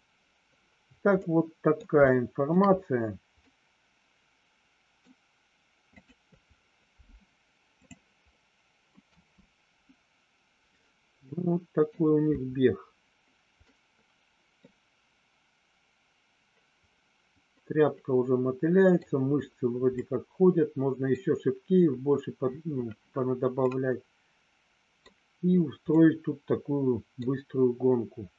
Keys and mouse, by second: 1.2 middle click, 2.1 shift+middle click, 3.5-5.1 middle drag, 6.1 click, 8.5 middle click, 9.1 space, 11.5 middle click, 13.9 middle click, 17.7-19.2 middle drag, 20.1-21.5 middle drag, 23.9-25.2 middle drag, 26.1-27.6 middle drag.